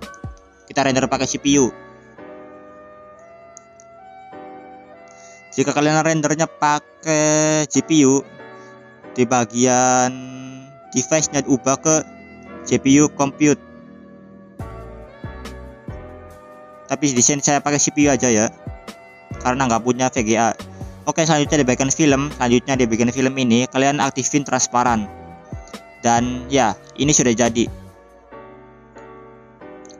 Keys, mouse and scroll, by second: 8.9-11.2 scroll up 5, 11.2-15.3 drag, 11.2 scroll up 1, 17.4 scroll down 2, 18.1-19.6 scroll down 3, 19.7 drag, 19.7 scroll down 4, 20.9 click, 21.4 click, 21.7 click, 22.2 scroll down 2, 23.3-23.9 scroll down 2, 23.9 click.